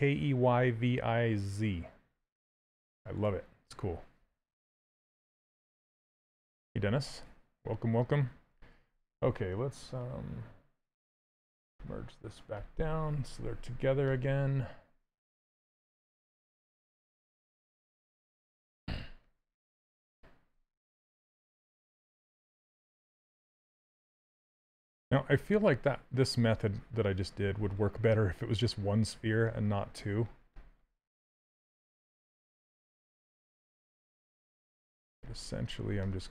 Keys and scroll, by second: 16.5 q, 18.2 w, 21.0 q, 22.9 s.